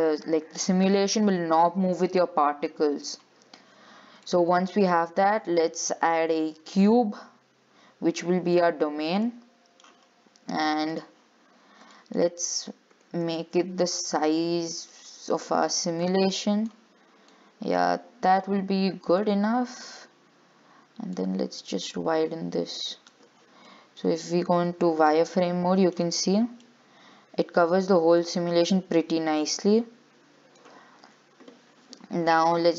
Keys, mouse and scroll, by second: 3.3 click, 4.2 scroll down 2, 4.5 shift+middle click, 5.0 scroll up 5, 6.6 shift+a, 9.1 scroll down 5, 9.4-11.1 middle drag, 11.1 click, 11.6-12.0 scroll down 7, 12.1 shift+middle click, 13.1 s, 16.2 click, 17.5 click, 18.8-19.4 scroll up 3, 19.4-21.3 middle drag, 21.3 click, 23.9 middle click, 24.8 z, 25.3 middle click, 26.2-26.8 scroll up 5, 26.8-28.1 middle drag, 28.1-28.4 scroll down 6, 28.4-31.3 middle drag, 31.3 z.